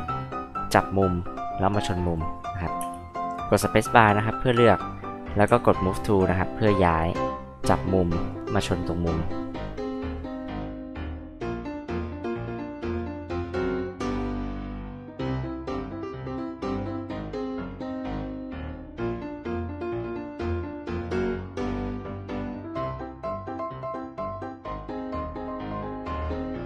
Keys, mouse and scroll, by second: 2.0 click, 2.8 space, 4.1-5.0 scroll up 2, 5.4 m, 6.1 click, 8.3 click, 9.7 click, 10.5 space, 10.7 click, 11.0 m, 11.2 click, 11.5 click, 11.8 space, 11.9 click, 12.2 m, 12.4 click, 13.0 click, 13.2-15.7 typing, 13.3 click, 13.8 click, 14.3 click, 14.6 click, 14.9 click, 15.1 click, 15.3 click, 15.4 drag, 16.1 click, 16.3 click, 16.7 m, 16.8 click, 17.1 click, 17.5 space, 17.6 click, 18.7 click, 19.0 click, 19.5-23.2 typing, 19.9 ctrl+click, 20.3 click, 20.8 click, 21.5 click, 22.0 click, 22.3 drag, 22.6 click, 23.0 click, 23.4 click, 23.7 click, 24.2 click, 24.3 space, 24.4 click, 24.8 click, 25.1 click, 25.2 space, 25.2 click, 25.8 click, 26.1 click, 26.3 space, 26.4 click.